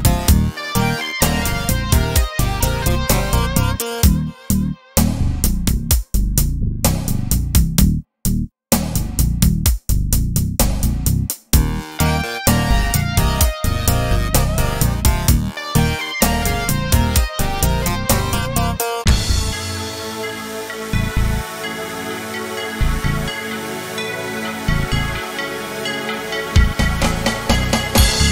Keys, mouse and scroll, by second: 0.7 shift+click, 3.3 click, 4.4 click, 5.7 shift+click, 7.0 click, 8.0 click, 9.0 shift+click, 10.2 click, 12.0 click, 13.1 shift+click, 15.1 click, 16.1 click, 18.1 shift+click, 19.3-20.6 drag, 21.8 click, 23.1 click, 25.7 shift+click, 27.5 shift+click, 28.2 shift+click.